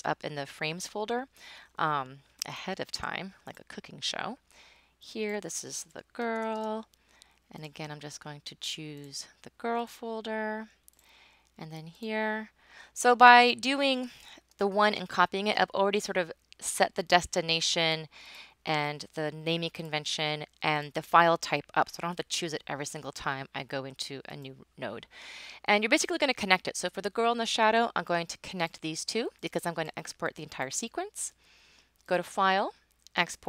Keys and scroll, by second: 5.7-7.0 typing, 14.0-14.8 typing.